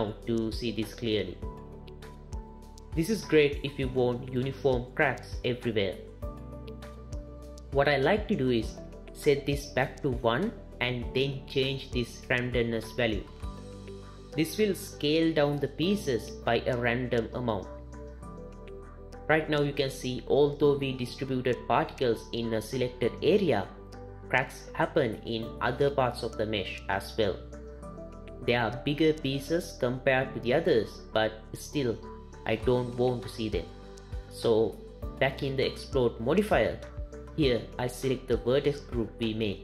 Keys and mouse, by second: 5.5-9.5 shift+middle drag, 9.8 click, 11.6-16.2 drag, 29.3 click, 36.2-39.4 drag.